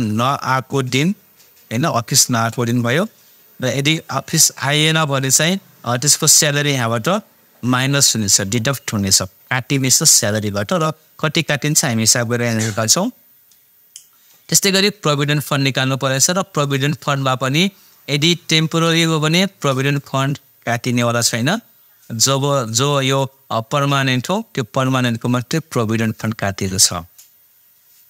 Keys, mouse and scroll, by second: 5.0 click, 11.8 click, 27.4 click.